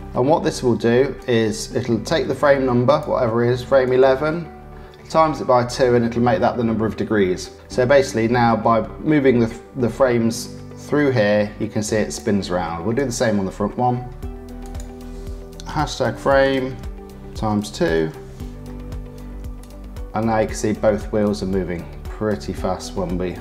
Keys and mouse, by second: 1.1-2.9 drag, 3.8-12.1 drag, 13.0 click, 14.6-18.6 drag, 19.6-23.4 drag.